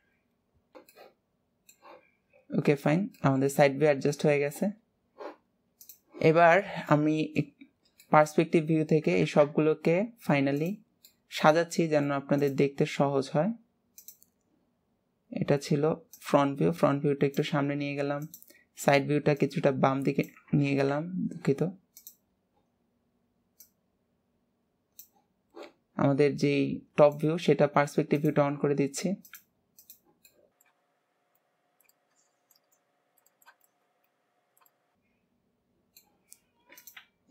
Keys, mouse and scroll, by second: 1.2-2.5 shift+middle drag, 2.7 middle click, 3.4 middle click, 5.9 middle click, 7.0 middle click, 7.8-8.2 scroll down 2, 8.2 middle click, 8.8 scroll up 2, 9.6 alt+z, 11.3-12.5 middle drag, 12.5-30.1 drag, 30.4-31.4 middle drag, 31.4 click, 31.9 middle click, 32.8 click, 33.3 middle click, 33.7 click, 34.7-36.4 middle drag, 36.4-37.3 scroll up 1.